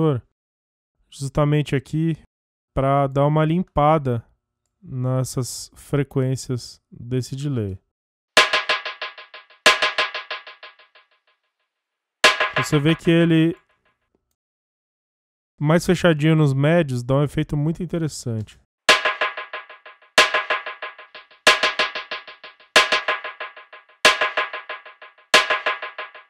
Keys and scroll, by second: 7.7 space, 13.0 space, 18.5 space.